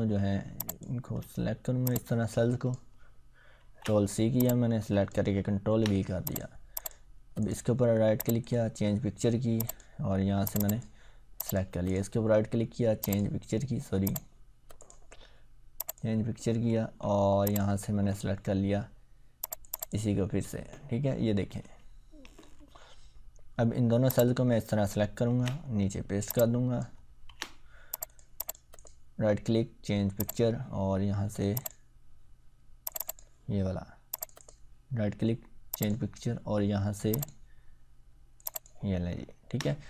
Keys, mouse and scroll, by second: 0.5 click, 1.9-2.8 drag, 3.6 ctrl+c, 4.4-5.3 click, 5.7 ctrl+v, 6.2 click, 7.4 right click, 8.2 click, 11.9 right click, 13.0 click, 14.8 right click, 15.7 click, 20.3-21.7 scroll down 1, 21.9-22.4 ctrl+scroll down 1, 22.4-23.0 scroll up 1, 24.1-25.1 click, 25.3 ctrl+c, 25.5-26.3 scroll down 1, 26.3-26.8 click, 27.3 ctrl+v, 28.1 click, 28.7 right click, 30.2 click, 34.4 right click, 35.7 click, 39.2-39.6 ctrl+scroll down 1.